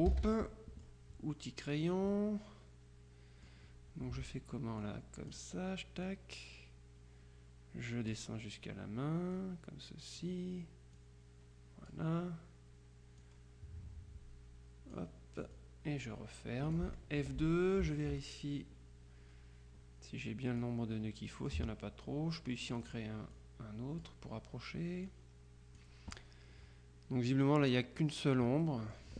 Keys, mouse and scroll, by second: 0.2 ctrl+g, 0.6 ctrl+click, 1.9 click, 4.9-5.9 drag, 6.1-8.6 drag, 9.4-10.8 drag, 11.3-12.5 drag, 13.4-15.5 drag, 15.6-17.3 drag, 17.3 F2, 18.0 ctrl+click, 20.9-22.0 drag, 22.8 click, 25.1-26.4 drag, 27.7 click, 28.7 click.